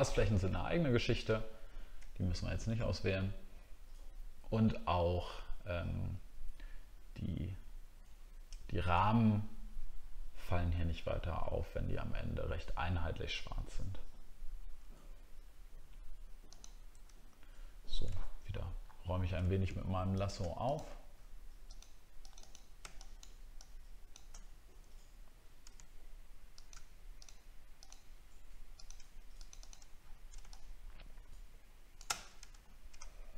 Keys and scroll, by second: 18.1 alt+scroll up 1, 19.1 alt+scroll up 1, 30.0 alt+scroll down 1, 32.6 alt+scroll up 1.